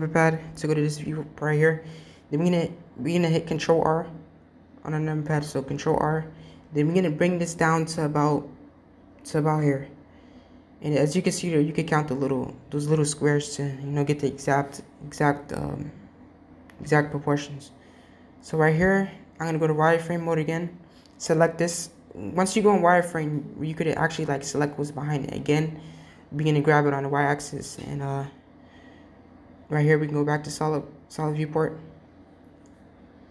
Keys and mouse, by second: 2.7 Tab, 3.3 Tab, 5.3 ctrl+r, 11.9-13.7 middle drag, 15.2 KP_3, 16.7-17.3 drag, 18.9 z, 20.3 click, 21.5 g, 28.7 Tab, 29.7 z, 31.1-32.3 middle drag.